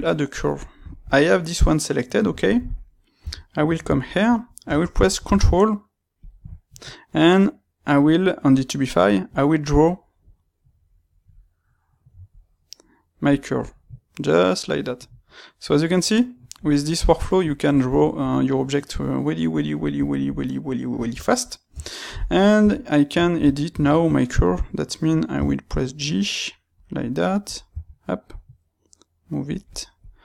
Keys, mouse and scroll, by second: 3.1 KP_3, 4.6 space, 14.5 middle click, 21.0 Tab, 22.6-24.4 middle drag, 22.6 KP_3, 24.4 click, 25.4 g, 26.8 click, 27.4 click, 27.7 g, 30.0 click.